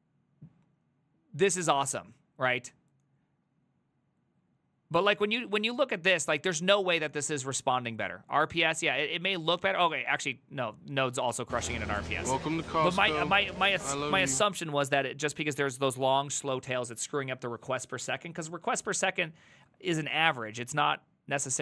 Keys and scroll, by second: 3.3-5.1 j, 5.7 j, 8.8 ctrl+u, 9.0 ctrl+u, 11.7-12.6 typing, 12.8 ctrl+d, 12.9 ctrl+d, 13.1 ctrl+d, 13.2 ctrl+d, 13.3 ctrl+d, 13.6 ctrl+d, 13.9 ctrl+c, 14.0 ctrl+c, 14.2 ctrl+c, 16.1 alt++.